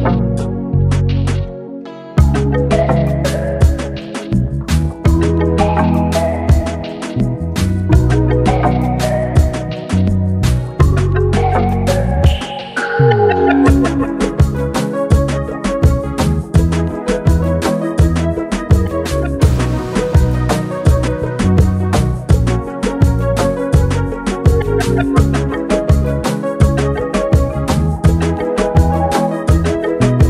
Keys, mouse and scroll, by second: 0.7-1.3 shift+drag, 2.7-3.3 shift+drag, 8.6-9.0 scroll down 1, 9.7-11.3 drag, 12.3-14.1 scroll up 1, 17.7 click, 17.8 click, 22.8 click, 29.0-29.5 scroll down 1, 29.5 click.